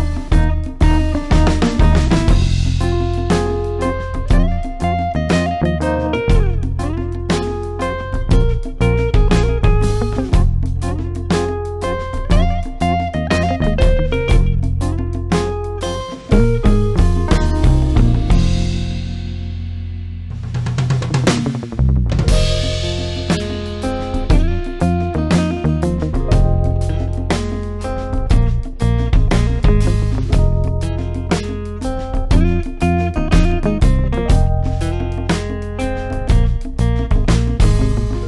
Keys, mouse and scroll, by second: 10.0 Tab, 11.6-12.8 drag, 14.6 Tab, 15.6 click, 16.6 Tab, 17.7-19.1 drag, 23.3-24.5 drag, 27.0 space, 27.3 click, 27.4-28.2 space, 34.1 click, 36.4 click, 37.8 space, 38.1 click.